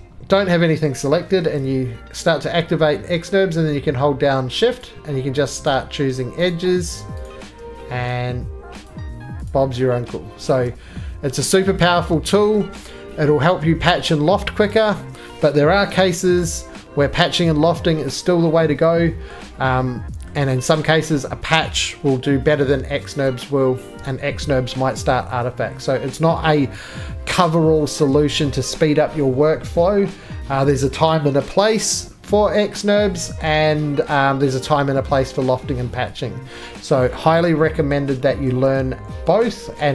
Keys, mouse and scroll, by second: 1.4 alt+v, 4.8 shift+click, 5.4 alt+shift+v, 5.7 shift+click, 6.5 shift+click, 7.2 shift+click, 8.0 middle click, 8.8 shift+click, 9.5 shift+click, 10.5 shift+click, 11.3 middle click, 12.6 middle click, 12.6 scroll, 13.5-13.9 scroll, 13.9 middle click, 14.8 right click, 21.8 middle click, 21.8-23.3 scroll, 24.1 scroll, 24.7 middle click, 24.9 scroll, 25.0 scroll down 3, 33.4 middle click, 33.5 middle click.